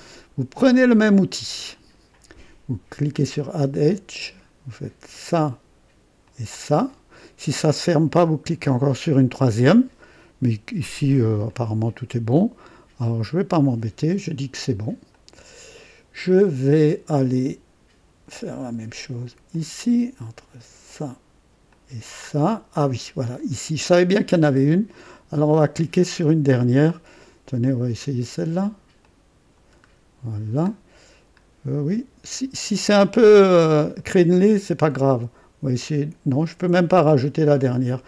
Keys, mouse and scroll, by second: 1.1 click, 3.1 click, 5.1 click, 6.3 click, 11.0 scroll up 1, 11.5-14.1 drag, 15.1 click, 16.2 click, 18.3 click, 19.5 click, 20.8 click, 21.7 click, 23.3 scroll up 1, 23.8 right click, 24.5 scroll up 1, 25.9 scroll up 1, 29.0 click, 29.7-30.1 scroll down 2, 30.7-31.4 scroll up 2, 31.6-32.0 scroll down 1, 32.3 right click, 34.0 right click, 37.9 click.